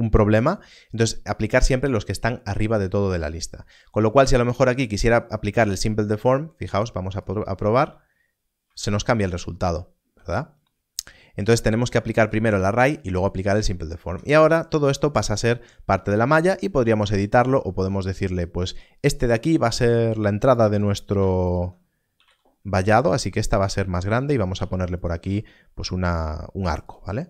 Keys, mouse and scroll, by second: 2.1 click, 5.1 click, 8.9 ctrl+z, 12.2 ctrl+z, 13.3 click, 14.0 Tab, 17.6-18.3 scroll up 1, 19.3 click, 21.4 shift+click, 23.5 click, 24.5 e, 26.8 click.